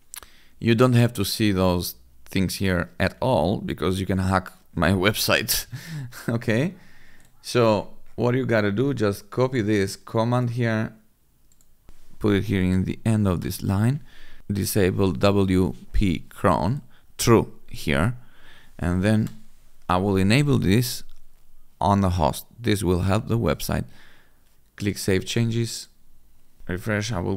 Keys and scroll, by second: 13.2 ctrl+v, 14.4 Return, 19.0 BackSpace, 26.6 F5.